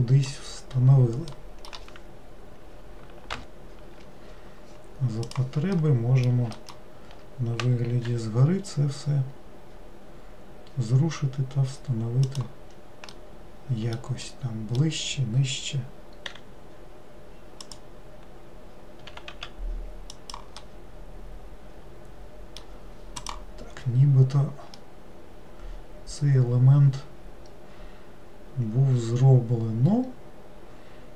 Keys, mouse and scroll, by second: 0.6-1.4 scroll down 2, 1.4-3.4 middle drag, 3.4 ctrl+l, 5.4 click, 5.9 middle click, 8.2 g, 13.3-16.5 middle drag, 16.5 r, 20.8-23.3 middle drag, 23.3 click, 24.2-24.9 scroll down 2, 24.9-28.1 middle drag.